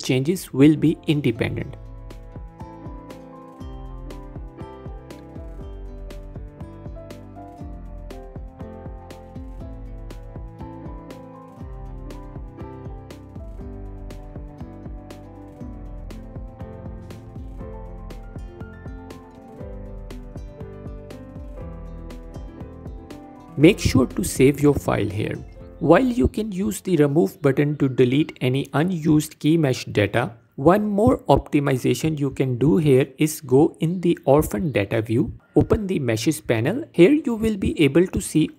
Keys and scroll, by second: 2.3 x, 3.3 Tab, 10.9 Tab, 14.0 shift+a, 17.7 s, 18.3 Tab.